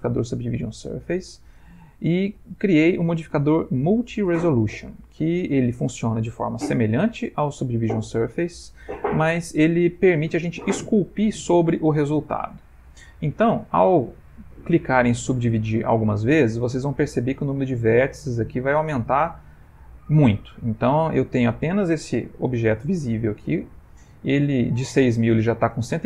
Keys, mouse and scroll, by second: 0.1 middle click, 2.0 click, 8.7 click, 11.0 click, 22.3 /, 22.8 /, 23.7 middle click, 24.0 middle click.